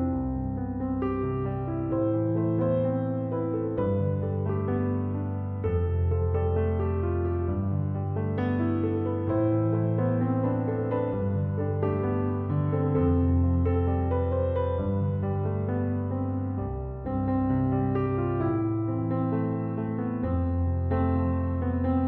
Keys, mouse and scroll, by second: 0.1 5, 0.3 Return.